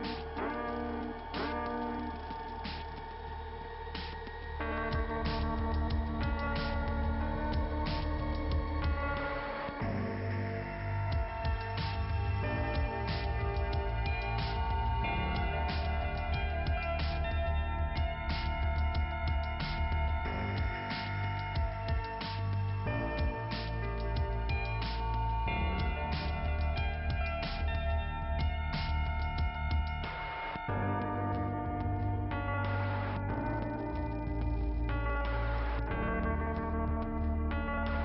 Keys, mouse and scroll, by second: 0.1 click, 12.3 click, 14.0 scroll down 1, 14.3 scroll up 1, 14.4 scroll down 1, 14.5 scroll up 2, 16.0-16.8 scroll down 1, 16.8 click, 18.0 click, 28.0 middle click.